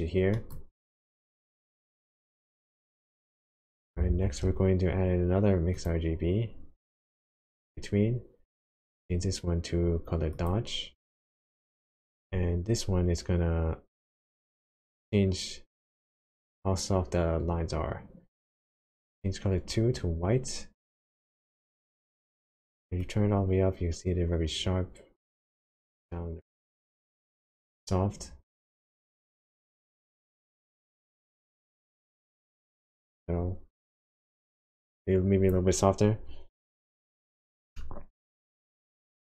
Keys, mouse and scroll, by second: 1.0 click, 1.4 middle click, 2.2 scroll up 1, 2.3 click, 2.8-3.8 scroll down 4, 4.1 shift+a, 8.9 click, 12.3-13.4 scroll up 5, 18.8 click, 22.3 click, 23.1 click, 36.6 click, 37.2-37.7 scroll down 3, 37.7 shift+middle click.